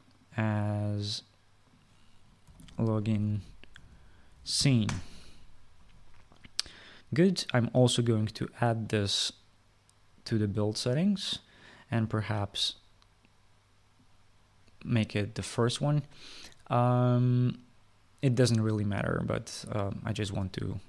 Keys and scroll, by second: 2.9-5.7 typing.